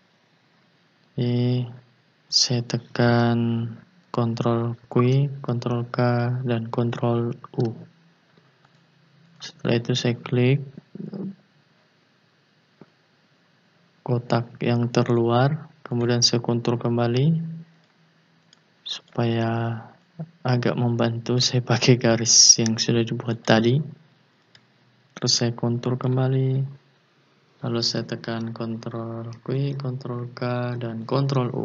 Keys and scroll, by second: 4.8 ctrl+q, 5.7 ctrl+k, 7.5 ctrl+u, 29.3 ctrl+q, 30.0 ctrl+k, 31.1 ctrl+u.